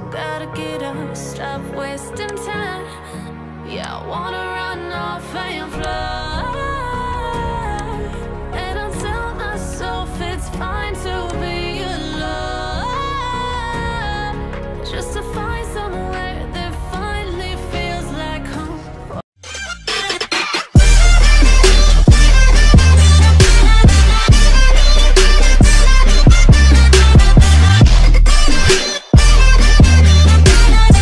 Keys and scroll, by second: 0.4 ctrl+alt+shift+e.